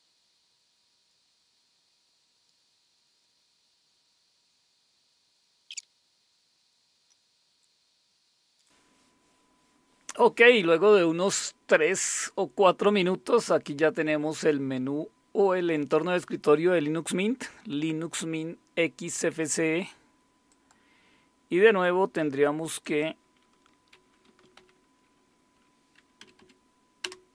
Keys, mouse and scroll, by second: 3.0 click, 3.2 click, 5.1 click, 5.3 click, 5.6 click, 5.9 click, 6.1 click, 6.2 click, 6.4 click, 6.7 click, 6.8 click, 7.1 Return, 20.5 click, 22.8 click, 24.0-25.1 typing, 26.2 Down, 26.4 Down, 27.0 Return.